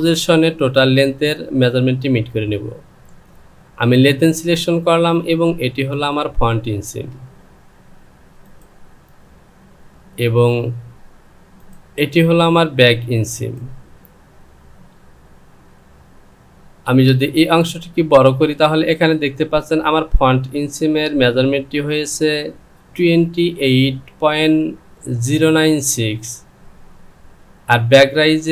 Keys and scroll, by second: 6.9 space, 16.9 Return.